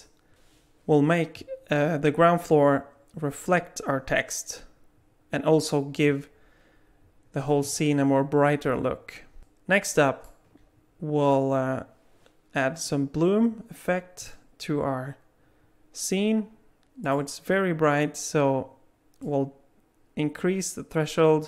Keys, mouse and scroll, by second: 9.4 middle click, 14.3 click, 17.1 click, 19.3 click.